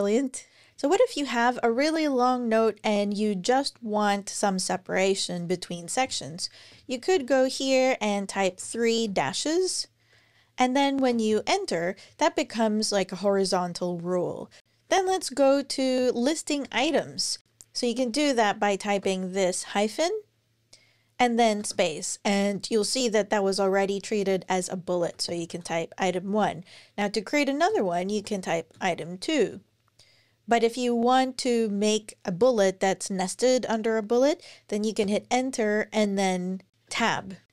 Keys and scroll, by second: 6.4 Return, 6.5 Return, 6.9 Page_Up, 8.1-8.9 typing, 10.7 Return, 14.7 Down, 14.9 Down, 15.8 super+Right, 16.4 Return, 16.5 Return, 18.8 -, 21.4 space, 24.7-25.8 typing, 27.5 Return, 27.7-29.2 typing, 34.8 Return, 36.7 Tab, 37.2-37.5 typing.